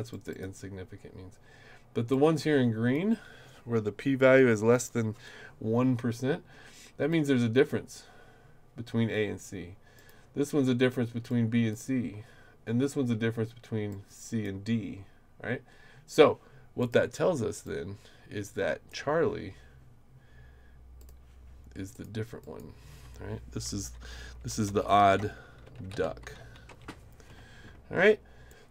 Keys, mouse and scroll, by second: 0.1 click, 0.3 click, 2.1 click, 7.1 click, 9.9 click, 11.3 click, 13.9 click, 16.8 click, 17.6-18.9 drag, 21.0 click, 21.9 click, 22.4 click, 24.4-26.9 typing, 28.5 click.